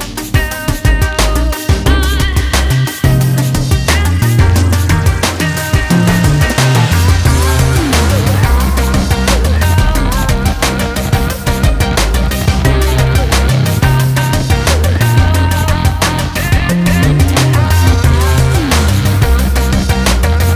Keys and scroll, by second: 9.6 ctrl+Return, 12.9 Delete, 15.7 ctrl+d, 16.0 ctrl+space.